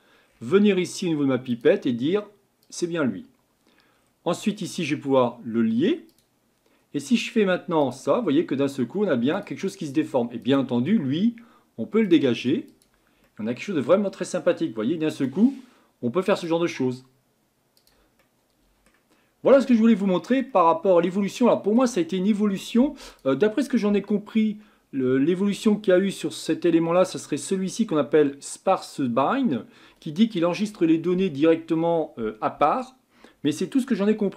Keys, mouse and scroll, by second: 0.2-1.5 scroll down 1, 1.5-4.0 drag, 4.0-6.1 scroll down 4, 6.1-13.2 drag, 13.2-15.1 middle drag, 15.1-18.2 drag, 18.2-23.1 middle drag, 23.1-25.8 drag, 25.8-29.4 scroll down 7.